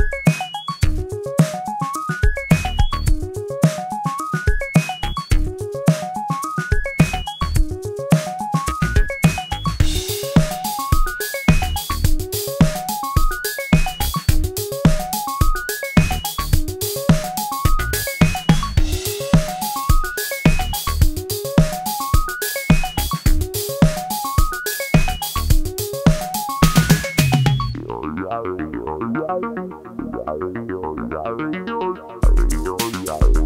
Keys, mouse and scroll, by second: 1.7 click, 2.7-8.7 drag, 8.7 F4, 9.1 click, 9.3 scroll up 1, 10.0 click, 11.0 click, 14.9-16.1 drag, 16.3-18.8 drag, 18.8 click, 19.8 click, 20.5 F4, 20.9 click, 22.3 F11, 23.4 click, 24.8 click, 27.8 right click, 29.6-31.5 drag, 31.5 ctrl+z, 32.1 click.